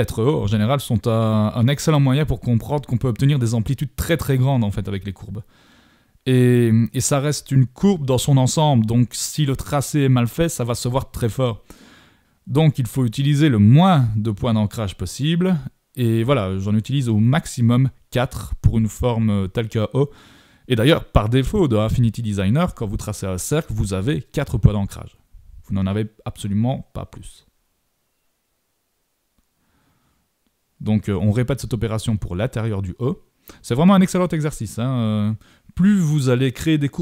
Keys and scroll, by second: 1.3 super+-, 13.0 super+=.